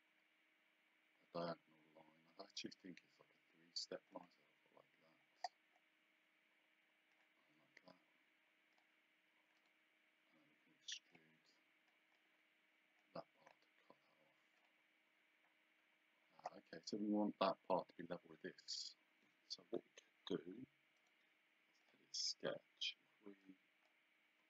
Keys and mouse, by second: 4.2 click, 7.1 click, 8.8 click, 9.6 right click, 11.1 click, 13.0 click, 14.6 click, 21.0 right click, 21.8 click, 23.4 click.